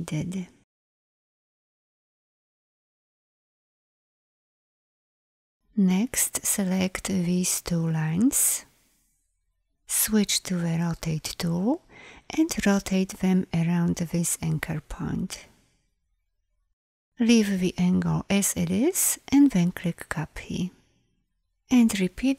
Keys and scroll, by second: 6.1 v, 10.3 r, 21.8 ctrl+d.